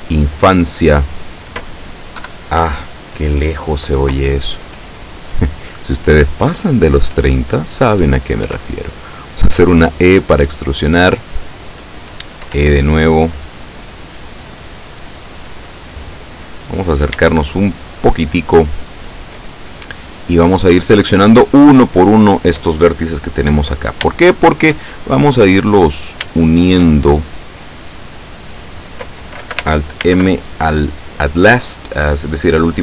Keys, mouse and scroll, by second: 2.3 KP_7, 8.5 e, 11.6 click, 12.5 e, 15.9 click, 16.6-17.2 scroll up 1, 17.4-19.5 shift+middle drag, 20.4 right click, 21.1-22.8 middle drag, 23.7-24.9 middle drag, 25.0 shift+middle click, 26.4 shift+right click, 30.1 alt+m, 31.6 click.